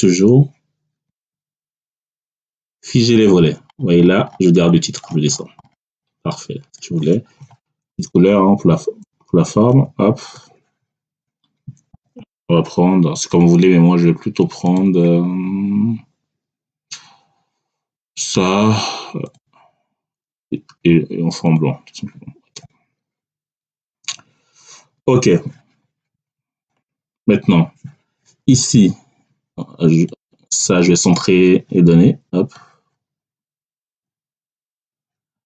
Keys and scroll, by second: 8.0 Down, 9.6 ctrl+shift+Right, 27.1 Down.